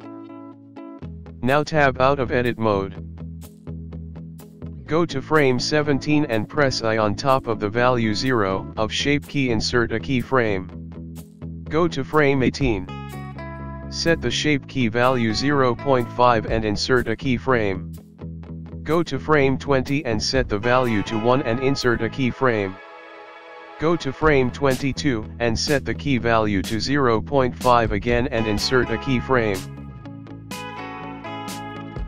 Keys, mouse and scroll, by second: 3.0 Tab, 3.4 scroll down 6, 10.1 i, 12.1 click, 14.6 click, 18.3 i, 19.3 click, 21.3 click, 22.6 i, 23.9 click, 26.6 click, 31.6 i.